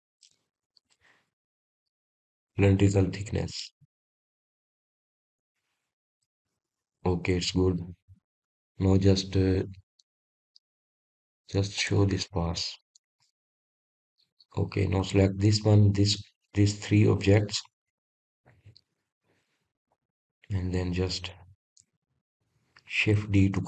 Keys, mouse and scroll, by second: 2.1-2.7 middle drag, 2.7-4.0 scroll up 7, 4.0-4.9 middle drag, 4.9 drag, 5.4-6.2 scroll up 4, 6.2-8.0 middle drag, 8.0-8.9 scroll down 1, 8.9-11.5 middle drag, 11.5-12.9 scroll down 2, 12.9 click, 13.5-13.9 scroll down 2, 13.9-16.1 middle drag, 16.1 click, 16.9 click, 18.2 shift+drag, 18.7-19.3 middle drag, 19.3-20.3 scroll up 2, 20.3 shift+click, 20.9 scroll up 1, 21.0-21.7 scroll down 2, 21.7-23.6 middle drag.